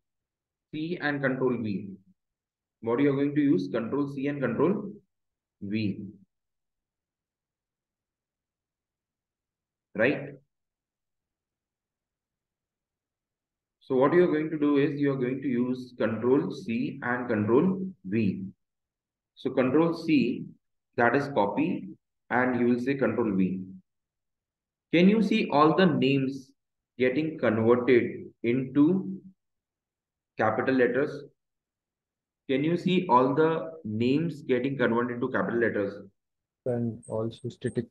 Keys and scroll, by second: 21.4 shift+Down, 23.4 ctrl+v, 25.8 Escape.